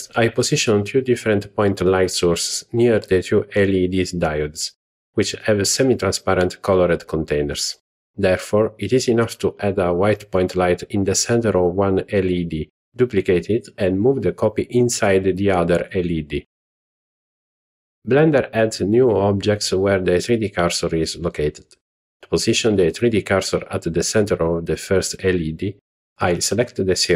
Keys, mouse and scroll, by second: 3.4 click, 5.0-5.6 shift+middle drag, 5.9 middle click, 6.8 scroll up 1, 8.3 z, 11.1 z, 13.0 click, 14.0 Tab, 14.7-15.7 scroll up 3, 18.8 alt+click, 20.6 click, 21.9 alt+click, 22.6 shift+middle click, 23.4-23.7 scroll up 2, 24.0 scroll up 1, 25.8 alt+a.